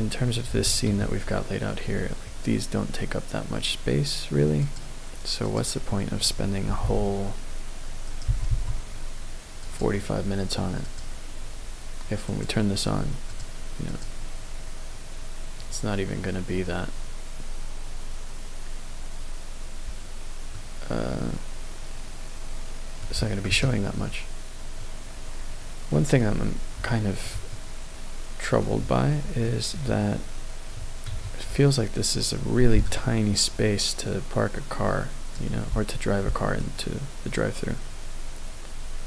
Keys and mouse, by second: 0.0 click, 0.9 KP_0, 4.6 click, 5.5 click, 6.7 g, 6.8 x, 8.0 right click, 8.2 g, 8.5 y, 9.6 click, 10.8 click, 12.3 click, 13.9 click, 20.5-23.0 middle drag, 23.5 KP_0, 24.8-26.2 middle drag, 26.8-27.2 shift+middle drag, 27.5-28.7 middle drag, 29.4-29.8 shift+middle drag, 31.1 KP_0, 32.7-35.6 d, 32.8 click, 36.2 d, 36.6-39.0 drag.